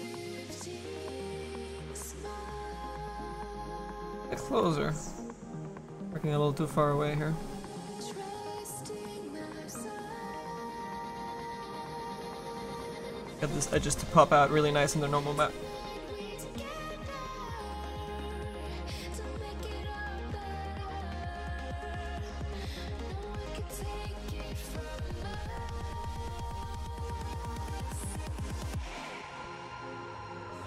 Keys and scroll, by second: 21.1 s, 28.9 s.